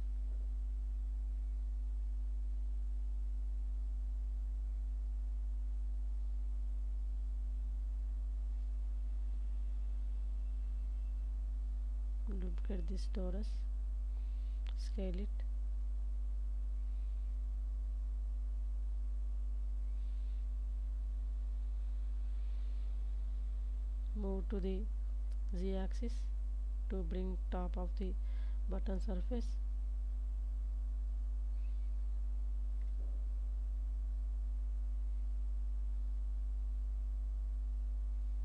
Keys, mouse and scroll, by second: 2.2 shift+click, 4.4 KP_7, 6.5 shift+s, 9.3 shift+d, 10.1 click, 10.6 s, 11.4 shift+z, 20.0 shift+click, 20.8-22.0 middle drag, 23.0 g, 23.4 z, 26.0 shift+click, 26.8 middle click, 28.0 click, 28.4-30.7 middle drag, 31.2 click, 31.9 s, 32.9 shift+z, 36.6 shift+click, 37.9 g, 38.2 z.